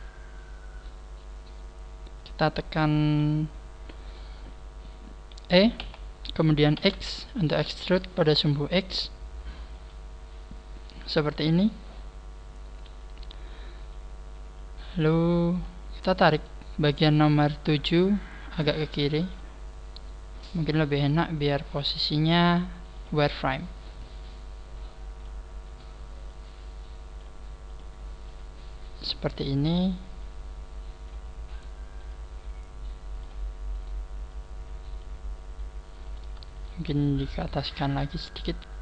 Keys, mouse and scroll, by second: 0.8-1.5 scroll down 4, 5.9 e, 10.0 click, 15.6 scroll up 4, 16.3 right click, 18.3 click, 23.1 click, 23.7 right click, 24.3 click, 25.7 right click, 27.7 click, 29.7 right click, 30.2 click, 31.5 right click, 32.1 click, 32.2 click, 33.7 right click, 34.3 click, 36.1 right click, 36.5 shift+right click.